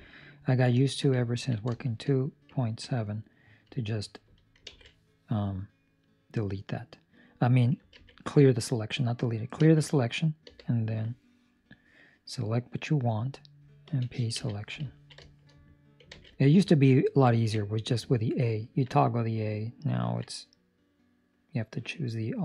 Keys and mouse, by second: 0.0 ctrl+middle click, 0.7 shift+middle click, 1.3 ctrl+middle click, 1.7 shift+middle click, 2.1 middle click, 2.5 ctrl+middle click, 3.0 middle click, 3.9 Escape, 4.2 Escape, 4.6 alt+a, 5.7 middle click, 10.4 b, 12.9 middle click, 13.8 p, 14.8 ctrl+middle click, 15.4 shift+middle click, 16.0 alt+a, 16.6 ctrl+middle click, 19.0 middle click, 20.0 ctrl+middle click, 20.2 middle click, 21.6 right click.